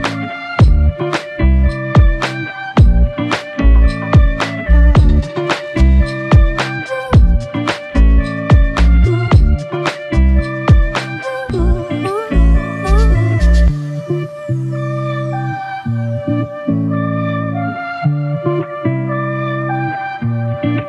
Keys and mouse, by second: 5.9 typing, 7.1 right click, 8.3 typing, 13.3 double click.